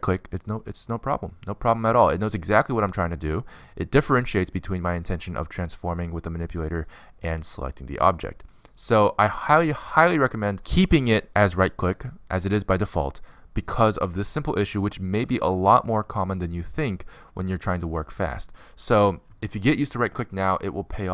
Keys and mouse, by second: 0.1-2.0 drag, 5.0 middle click, 5.1 right click, 6.7 click, 6.7 middle click, 6.7 right click, 8.7-10.0 middle drag, 10.7-13.1 middle drag, 13.9 middle click, 17.8 z.